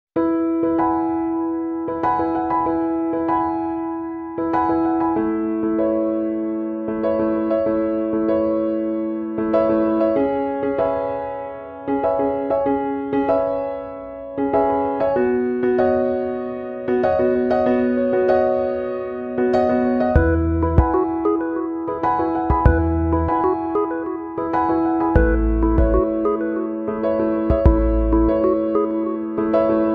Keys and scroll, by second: 0.8 ctrl+z, 5.2 ctrl+z, 22.2 ctrl+-, 22.9 ctrl+0.